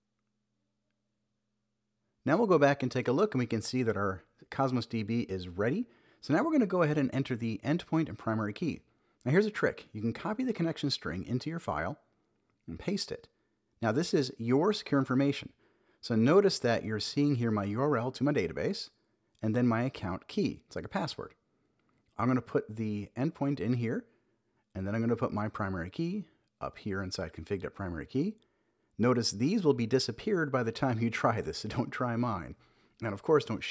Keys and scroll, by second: 3.7 super+v, 5.4 super+Up, 6.2 super+x, 11.1 Return, 11.8 super+v, 12.7 super+Left, 13.2 alt+Right, 14.3 Right, 14.6 shift+super+Left, 14.8 Delete, 15.1 alt+Right, 17.4 Right, 17.9 Return, 18.3 alt+shift+Right, 19.0 shift+Right, 19.2 Delete, 20.6 shift+super+Right, 21.1 super+x, 21.3 Up, 22.1 alt+Right, 23.0 Left, 23.2 shift+super+Right, 23.5 shift+Left, 24.1 super+v, 24.4 Down, 26.1 super+x, 26.3 Up, 27.1 alt+Right, 27.9 Right, 28.4 shift+super+Right, 28.7 shift+Left, 29.7 super+v, 29.9 super+s, 30.4 Down, 32.0 Return, 32.9 super+Up.